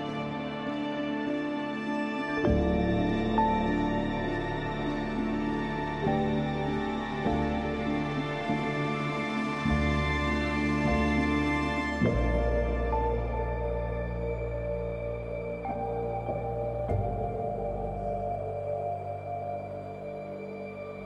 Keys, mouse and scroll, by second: 1.7 scroll up 1, 3.3 scroll down 1, 4.2-5.4 scroll up 1, 6.3 F4, 13.7 click, 17.0 right click, 18.0 click, 19.8 scroll up 1, 19.9 space, 20.1 click, 20.4 space.